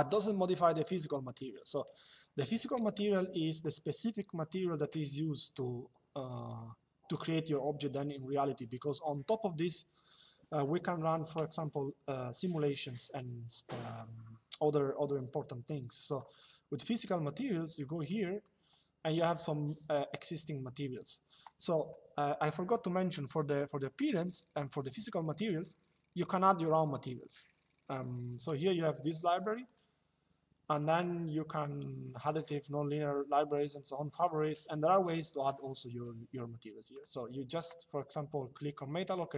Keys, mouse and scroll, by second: 15.8 click, 17.8 click, 29.0 click, 33.3 click, 36.7 click, 39.0 click.